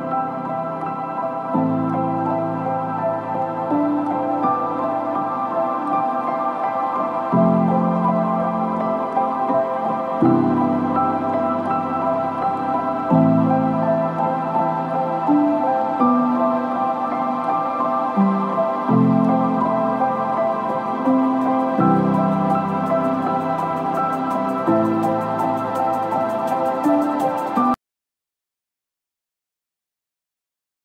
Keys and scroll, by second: 17.7 F3, 18.0 Escape, 23.8 shift+F2, 24.2 Escape, 25.8 F3, 26.3 Escape, 27.2 ctrl+g.